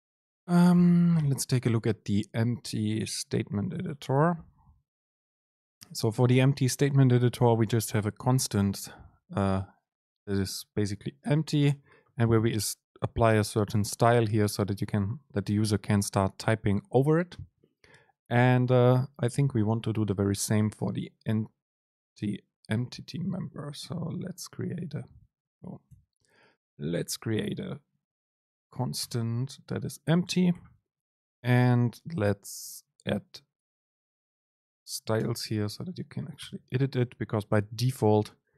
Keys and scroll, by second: 11.4 super+2, 23.0 ctrl+shift+super+F12, 26.0 super+1, 28.6 super+space, 30.6 super+2, 35.4 super+space, 37.0 Right.